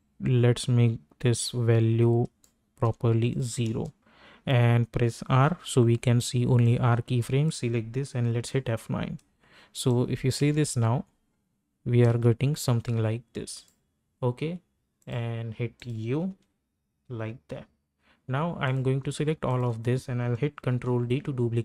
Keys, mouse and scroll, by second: 3.6 Return, 5.3 r, 5.9 r, 6.6-8.3 drag, 8.3 F9, 9.9 click, 10.4 space, 13.5 space, 13.7 click, 16.4 u, 17.2 u, 18.6 click, 19.5 shift+click, 20.7 ctrl+d.